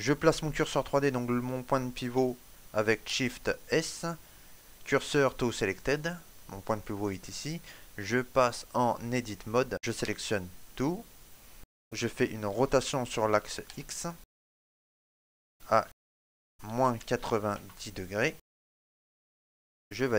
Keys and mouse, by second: 2.8 shift+s, 8.3 click, 9.8 a, 12.3 r.